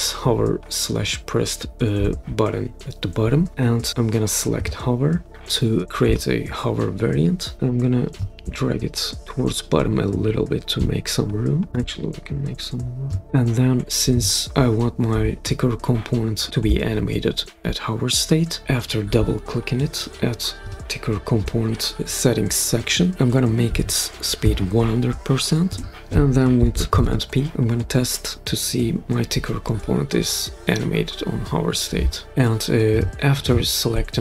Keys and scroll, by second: 23.6 1, 24.4 0, 25.7 Return, 26.9 super+p.